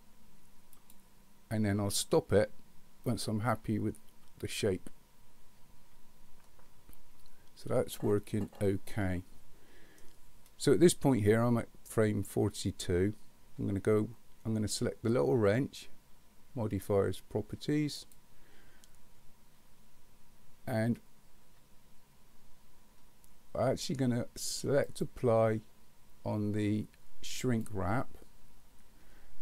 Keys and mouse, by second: 0.9 click, 3.1-10.0 middle drag, 24.9-27.7 drag.